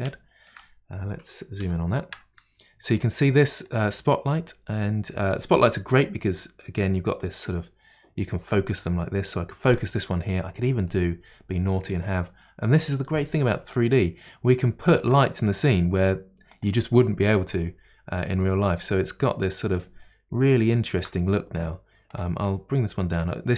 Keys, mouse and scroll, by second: 1.6 KP_Decimal, 2.2-5.2 middle drag, 7.2-10.2 drag, 10.4-11.2 middle drag, 11.2-12.3 scroll down 1, 13.8-15.0 middle drag, 15.0 shift+d, 18.5-20.1 middle drag, 20.1-20.8 scroll up 2, 20.8-22.1 shift+middle drag, 22.1 click, 23.1-23.5 drag.